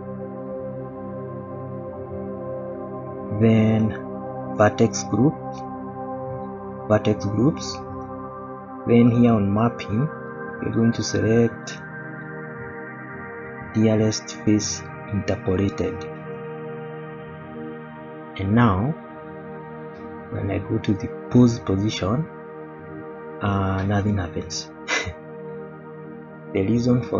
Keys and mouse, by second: 3.8 click, 5.7 click, 10.6 click, 13.6-16.5 drag, 18.6 shift+middle drag, 19.5 click, 22.4 click, 23.5-25.2 middle drag.